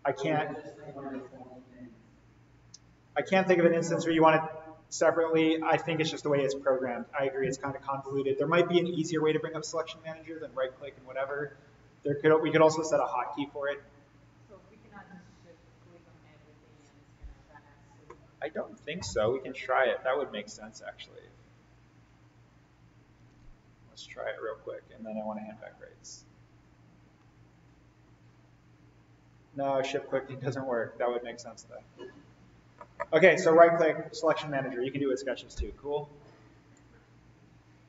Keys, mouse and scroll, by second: 18.5 click, 19.1 right click, 20.1 click, 22.6 click, 23.7 Delete, 25.0 click, 25.6 Delete, 26.5 Delete, 28.0 shift+click, 31.7 click.